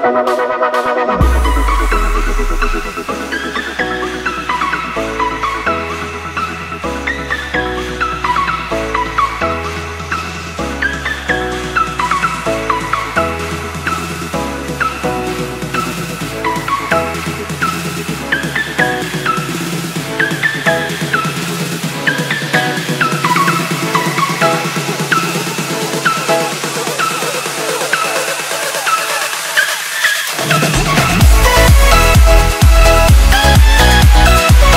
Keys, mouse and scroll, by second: 1.1-13.5 scroll up 1, 13.7 click, 19.4 Return, 20.4-24.2 scroll down 1, 24.2 click, 28.1 ctrl+z, 29.2 click, 32.9 right click.